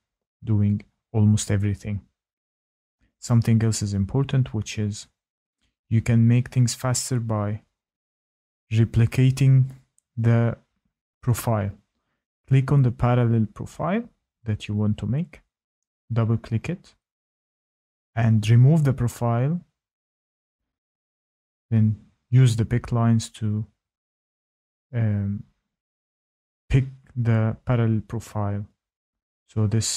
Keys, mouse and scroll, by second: 1.0-1.6 scroll, 5.0 shift+middle click, 10.9 Tab, 11.6 click, 12.2 Tab, 12.6 Tab, 13.1 click, 13.9 click, 14.1 click, 14.8 click, 15.1 click, 16.3 click, 16.5 click, 17.1 Tab, 17.8 click, 18.7 Delete, 20.5 click, 21.9 middle click, 21.9-22.5 scroll, 23.1-23.5 scroll, 25.1 shift+middle click, 26.4 shift+middle click, 27.6 shift+click, 29.4 Tab, 29.8 Tab.